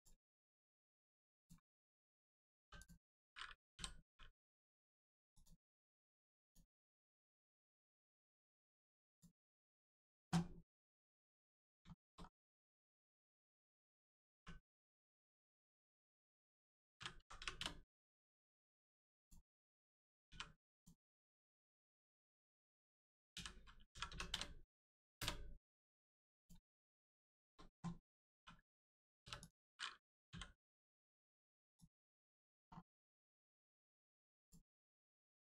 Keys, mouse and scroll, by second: 0.3 shift+middle click, 0.6 middle click, 1.3 click, 2.5 3, 2.7 click, 3.7 l, 5.3 click, 8.1 click, 8.5 scroll up 1, 9.1 click, 9.3 scroll down 1, 10.7 click, 11.3-11.7 scroll up 1, 11.9 shift+middle click, 12.1-12.5 scroll up 1, 12.7 shift+middle click, 13.1 scroll up 1, 14.3 1, 14.7 click, 15.3 shift+click, 17.1 x, 18.7 click, 19.1 shift+click, 20.2 shift+r, 20.7 click, 21.7 shift+click, 23.3 s, 23.9 y, 24.0 0, 26.3 click, 27.1 shift+click, 28.3 shift+r, 28.7 click, 29.1 3, 29.3 click, 31.7 click, 32.3 scroll down 1, 32.9 Tab, 33.2 click, 33.3 Tab, 33.7 click, 34.1 scroll up 1, 34.3 click, 34.7-35.1 scroll up 1, 35.3 shift+middle click.